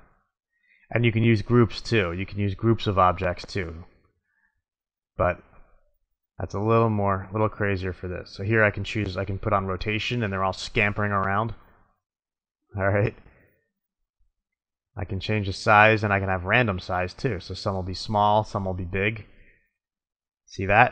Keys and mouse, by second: 0.0-1.8 middle drag, 1.8-3.5 drag, 4.6-6.1 middle drag, 7.0 middle click, 15.0 click, 16.5 middle click, 17.5 click, 17.9-19.5 middle drag.